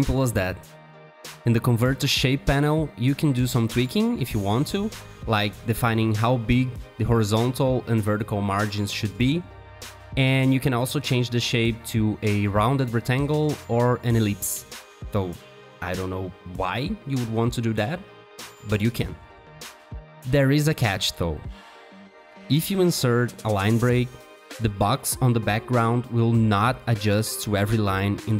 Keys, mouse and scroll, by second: 5.2 double click, 23.1 t, 25.2 Return, 27.8-28.3 typing.